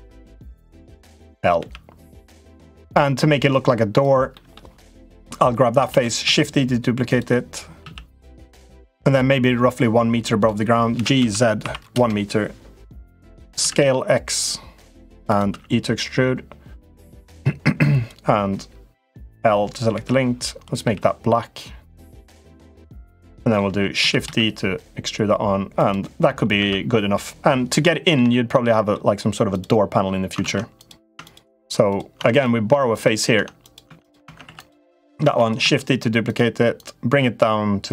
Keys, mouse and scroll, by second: 0.5 click, 1.3 l, 2.0-3.8 drag, 4.1 middle click, 4.9 click, 5.6 shift+d, 6.0 s, 7.5 s, 9.0-10.2 drag, 10.7 g, 13.3 s, 15.2 e, 17.6 click, 19.7 l, 20.6 g, 22.9 middle click, 23.7 shift+d, 26.3 Tab, 27.5 middle click, 28.0 shift+middle click, 28.4 middle click, 29.2 click, 30.2 ctrl+z, 30.5 click, 30.8 Tab, 31.0 click, 31.6 click, 31.9 Tab, 32.1 click, 33.1 Tab, 33.4 click, 33.6 Tab, 34.0 Tab, 34.2 3, 34.4 click, 35.0 shift+d, 35.3 s, 36.6-37.9 drag.